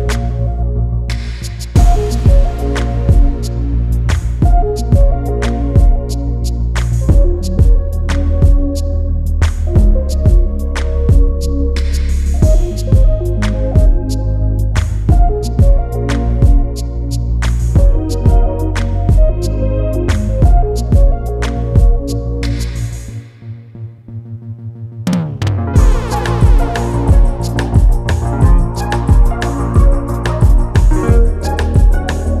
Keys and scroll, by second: 0.7-1.2 typing, 3.0 [, 3.6 [, 4.0 [, 12.3 ctrl+t, 22.4 Return, 24.5 e.